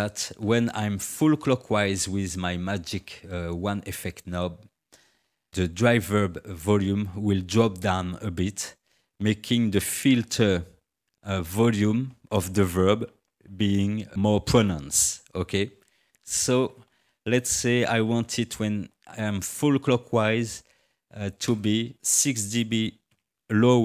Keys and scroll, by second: 23.1 -.